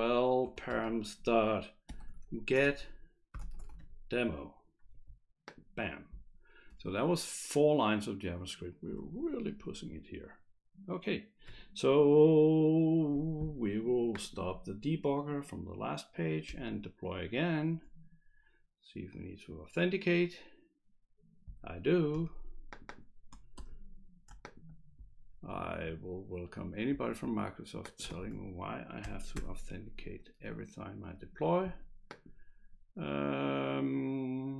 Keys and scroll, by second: 0.0-0.3 typing, 0.4 Return, 1.7-4.2 typing, 4.9 Escape, 16.5 F5, 23.5 ctrl+c.